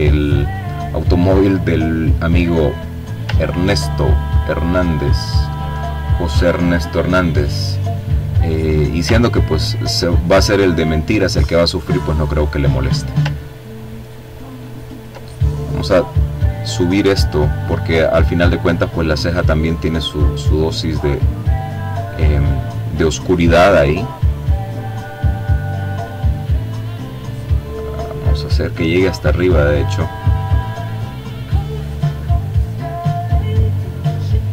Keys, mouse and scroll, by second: 1.4-2.4 ctrl+scroll down 1, 2.4-3.7 ctrl+drag, 6.2 click, 7.0-7.9 ctrl+scroll up 2, 8.6-10.7 drag, 11.1-12.1 ctrl+scroll down 1, 12.2-13.3 ctrl+drag, 13.3 ctrl+click, 14.5-15.9 drag, 16.4-18.0 drag, 18.6 click, 19.3-20.7 drag, 20.9-22.9 drag, 23.7 click, 25.1-26.7 drag, 27.0-28.8 drag, 29.7-32.3 drag, 32.5-33.9 drag.